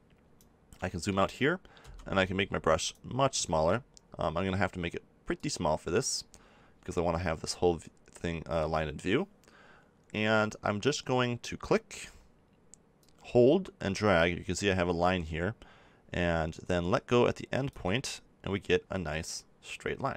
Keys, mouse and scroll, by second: 0.1-1.6 drag, 0.9 right click, 1.6 middle click, 1.8 f, 2.9-5.3 drag, 4.1 f, 5.5-7.3 drag, 13.0-14.6 drag.